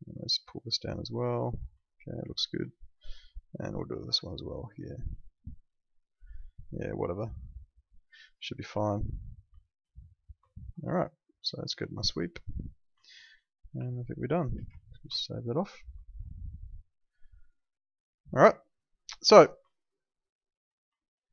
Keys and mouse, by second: 0.6 click, 1.9 alt+middle click, 2.7 alt+middle click, 6.3 alt+middle click, 8.6 click, 9.6 alt+middle click, 10.5 alt+middle click, 11.3 click, 12.0 alt+middle click, 12.5 click, 13.0 alt+middle click, 15.2 alt+middle click, 16.2 alt+middle click, 19.0 middle click, 19.6 alt+middle click, 20.9 alt+middle click.